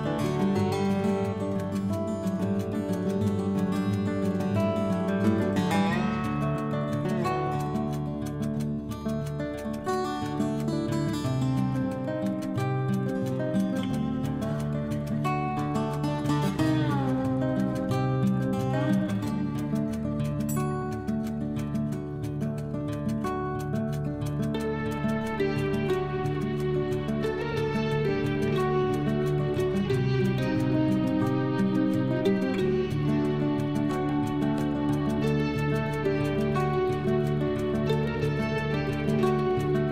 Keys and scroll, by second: 8.3 ctrl+z.